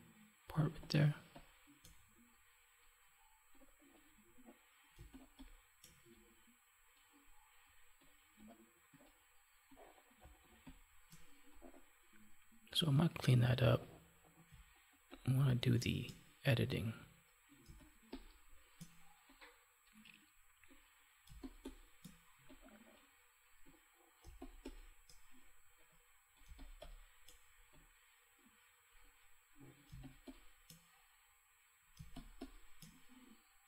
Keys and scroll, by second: 0.5 space, 4.9 space, 10.2 space, 14.4 space, 17.6 space, 21.2 space, 24.1 space, 26.4 space, 29.8 space, 31.9 space.